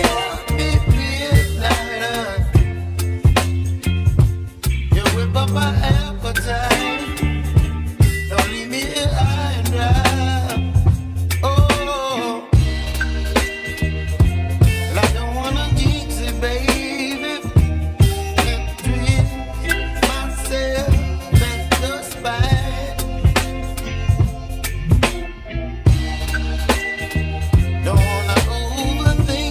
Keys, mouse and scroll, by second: 0.4-1.6 middle drag, 1.6-2.4 scroll up 3, 2.4-4.2 middle drag, 4.2 click, 5.0 3, 5.2 click, 5.7-6.8 middle drag, 6.8 ctrl+click, 7.5-8.7 middle drag, 8.7 shift+click, 9.7-10.6 scroll down 1, 10.6 ctrl+d, 20.4-20.8 scroll down 1, 20.8-21.2 scroll up 2, 21.2 scroll down 2, 21.4-21.9 scroll up 2, 21.9 ctrl+d, 23.4-23.7 scroll down 2, 23.7-24.6 scroll up 2, 24.6 shift+d, 26.1-28.6 scroll down 1.